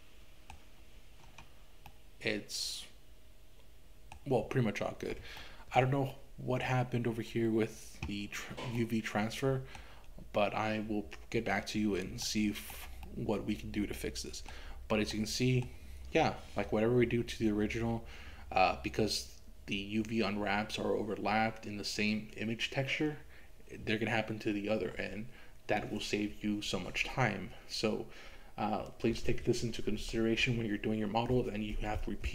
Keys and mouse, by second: 1.9-4.2 middle drag, 5.4 shift+middle click, 6.2 middle click, 8.8-9.8 middle drag, 12.2 shift+middle click, 13.1-14.6 middle drag, 15.1 middle click.